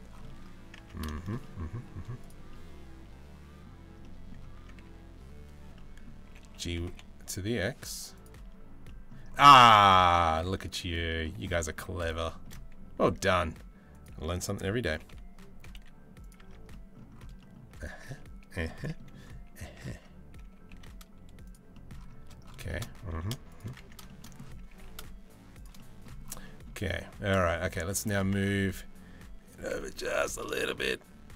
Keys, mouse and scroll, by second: 0.4 Tab, 0.7 shift+middle click, 1.0-1.4 middle drag, 1.5 z, 2.1-3.2 middle drag, 3.6-3.9 middle drag, 4.2 Tab, 4.4 a, 5.3 middle click, 5.9 g, 8.1 Tab, 8.5 middle click, 9.1 middle click, 10.1 Tab, 11.1 middle click, 11.8 shift+middle click, 12.6 s, 14.5 g, 16.1 Tab, 16.3 middle click, 17.0 middle click, 18.3 middle click, 19.5 Tab, 20.2 g, 21.3 middle click, 22.3 shift+middle click, 22.6 g, 23.5 Tab, 23.7 shift+middle click, 24.3 g, 25.4 middle drag, 26.0 shift+middle drag, 27.1 middle click, 28.0 Tab, 29.2 g.